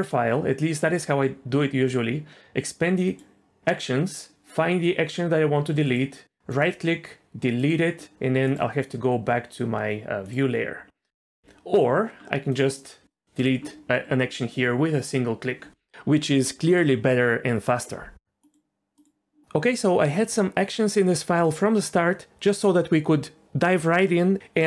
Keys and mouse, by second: 3.0 click, 6.5-7.7 right drag, 8.5-10.4 drag, 12.5-13.5 drag, 19.0 click.